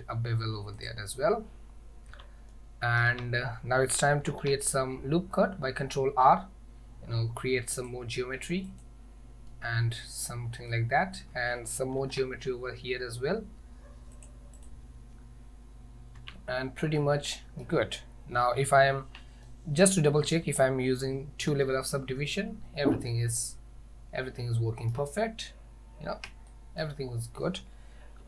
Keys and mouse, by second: 2.2 Tab, 2.6 middle click, 3.2 Tab, 4.3 ctrl+r, 10.3 middle click, 12.0 ctrl+r, 16.3 Tab, 17.0-17.7 middle drag, 19.5-20.4 middle drag, 21.6 ctrl+2, 23.1-25.0 middle drag, 26.6-26.9 shift+middle drag.